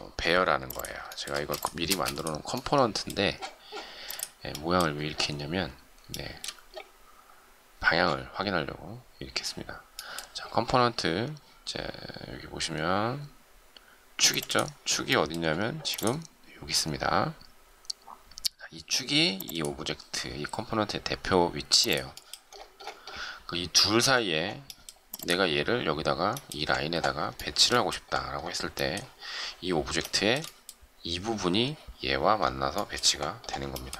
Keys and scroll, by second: 1.9 shift+space.